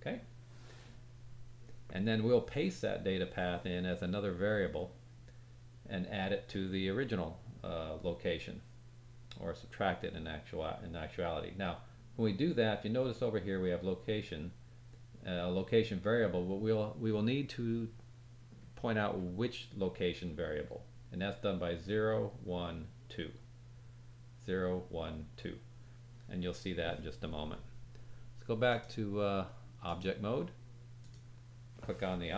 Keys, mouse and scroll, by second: 28.6-31.1 drag, 28.6-31.1 middle drag, 28.6-31.1 right drag.